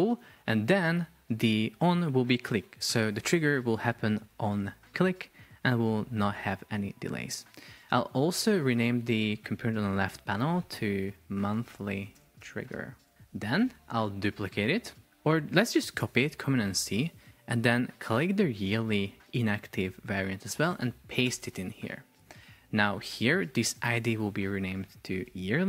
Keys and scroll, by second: 11.3 shift+m, 13.1 shift+t, 13.7 Return, 15.2 super+c, 21.3 super+v.